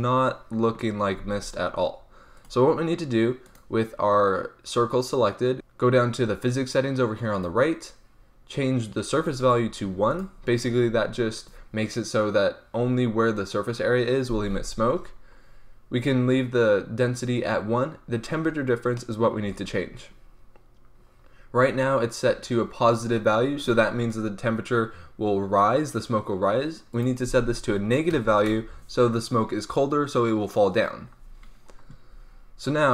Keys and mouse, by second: 1.2 alt+a, 5.5-14.7 drag, 18.9 click, 19.4 drag, 19.5-25.4 drag, 26.9 click.